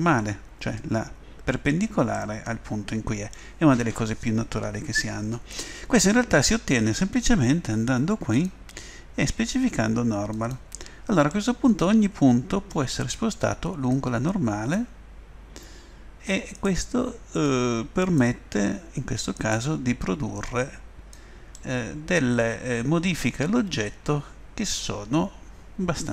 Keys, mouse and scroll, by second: 0.2 middle click, 0.4 middle click, 2.2-5.8 middle drag, 8.3-10.2 drag, 11.3 middle click, 12.1 middle click, 13.9-15.7 drag, 16.5-17.5 right drag, 18.5 click, 19.4-20.5 right drag, 21.2 click, 21.5 middle click, 22.2 middle click, 22.4 middle click, 22.8 right click, 23.0 middle click, 23.9 middle click.